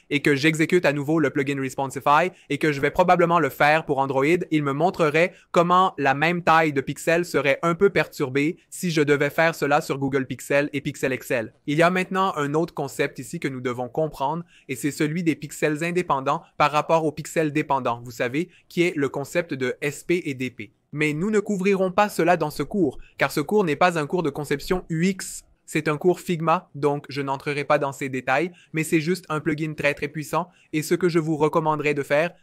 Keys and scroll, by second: 0.1-2.5 typing, 14.5 BackSpace, 29.4 BackSpace.